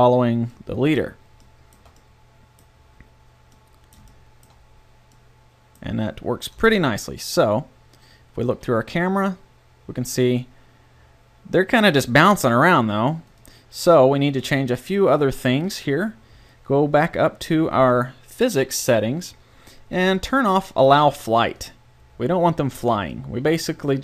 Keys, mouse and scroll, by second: 0.7 middle click, 1.0 middle click, 1.5 middle click, 6.5 KP_0, 8.5 a, 13.3-15.1 drag, 16.7-21.6 middle drag, 23.2-24.0 drag.